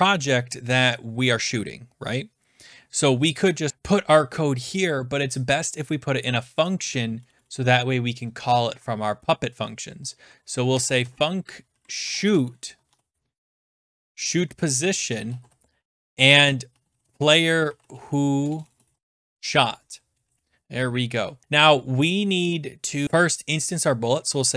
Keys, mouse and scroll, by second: 6.6 click, 7.2-11.5 drag, 7.2 BackSpace, 7.4 BackSpace, 7.6 BackSpace, 8.2 Return, 9.0 Return, 10.4-20.7 typing, 21.4 Return, 21.4 ctrl+z, 21.4 click, 23.7-24.5 typing.